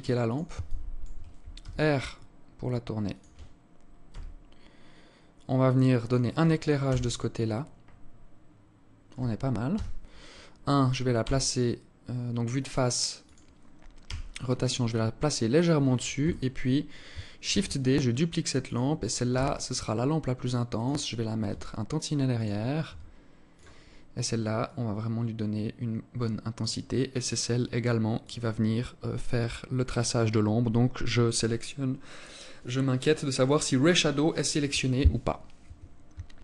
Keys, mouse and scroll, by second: 0.1 alt+shift+click, 1.1 r, 3.6 g, 6.3 KP_0, 9.2 KP_1, 10.7 g, 13.5 r, 15.7 KP_7, 16.9 shift+d, 18.8 r, 21.0 g, 22.3 r, 24.1 click, 27.7 click, 35.9 ctrl+s.